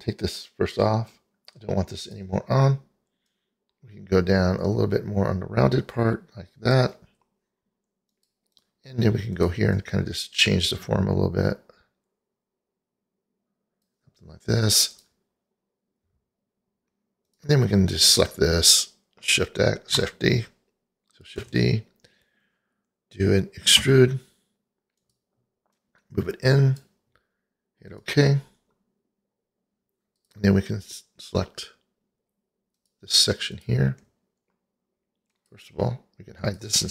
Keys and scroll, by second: 21.4 shift+d, 23.8 e.